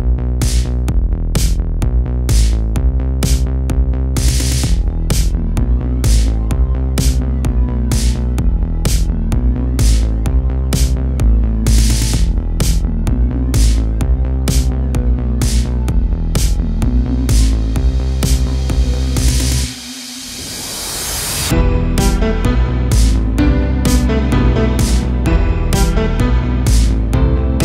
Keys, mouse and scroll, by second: 0.6 r, 1.7-2.5 scroll down 1, 2.5 shift+middle click, 3.3 KP_0, 4.3-4.7 scroll up 1, 4.7-5.3 scroll down 1, 5.3 shift+middle click, 6.0 g, 6.8 r, 7.7 g, 8.8 r, 10.0 a, 10.1 a, 10.5 ctrl+r, 11.4 a, 11.6 a, 12.9 a, 13.0 a, 13.4 a, 13.8 s, 15.1 g, 16.6 r, 17.5 a, 18.0 a, 18.2 a, 18.5 Tab, 19.2-19.5 scroll down 1, 19.5 Tab, 20.0 a, 20.5 shift+d, 21.0 g, 22.8 r, 24.2 g, 26.0 r, 26.9 g.